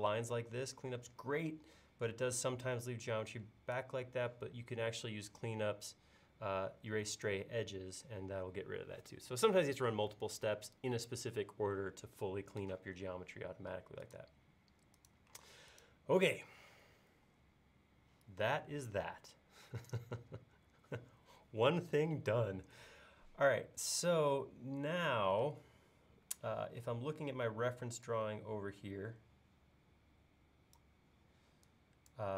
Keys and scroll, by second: 15.5 space, 19.7 e, 25.5 space, 27.6 e.